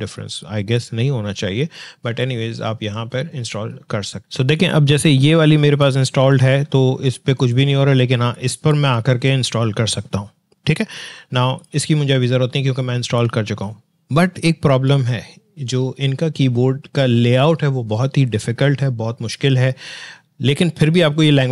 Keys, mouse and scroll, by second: 4.5 click, 11.6 click.